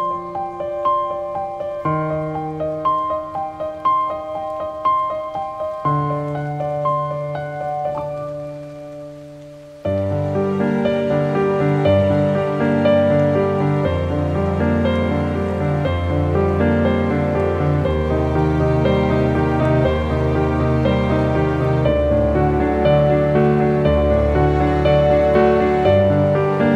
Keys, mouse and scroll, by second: 0.9-5.7 drag, 5.7 scroll down 1, 6.4 ctrl+t, 7.3-11.1 drag, 11.5-13.8 shift+drag, 13.8 click, 14.8 scroll up 1, 17.2 scroll down 1, 21.8 click.